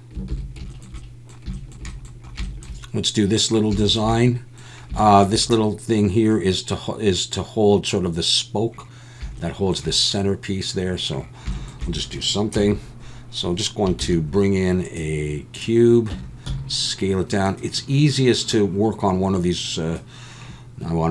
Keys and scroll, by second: 0.3 ctrl+s, 12.6 KP_7, 14.0 shift+a, 16.1 Tab, 16.5 s.